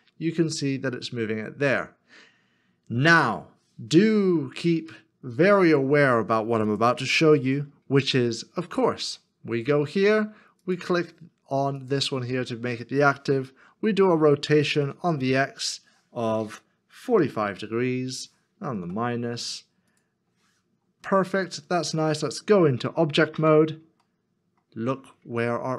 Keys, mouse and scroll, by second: 7.4 r, 10.6 shift+click, 11.8 shift+click, 13.6 r, 15.9 z, 17.1 z, 17.2 4, 17.3 5, 21.3 -, 21.5 shift+middle click, 23.4 Tab, 24.0 middle click.